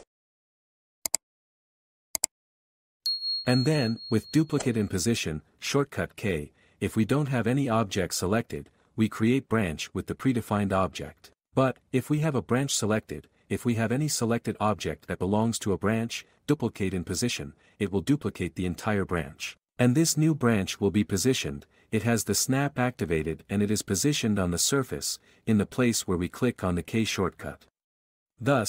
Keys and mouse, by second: 0.0-2.4 typing, 4.1 r, 5.4 s, 6.4 q, 7.6 click, 8.8 alt+a, 10.4 k, 11.9 s, 12.6 s, 13.7 x, 16.9 q, 18.2 b, 18.4 click, 19.1 q, 21.6 k, 22.6 click, 24.6 k, 25.5 click, 28.2 k.